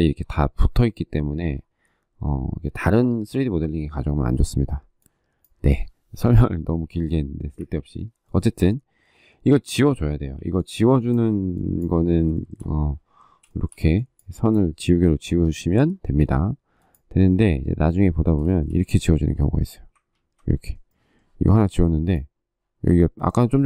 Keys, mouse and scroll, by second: 7.4 Delete, 10.1 e, 12.1 shift+middle click, 13.3 shift+middle click, 18.2 shift+middle click, 18.5 shift+scroll, 19.9 ctrl+z.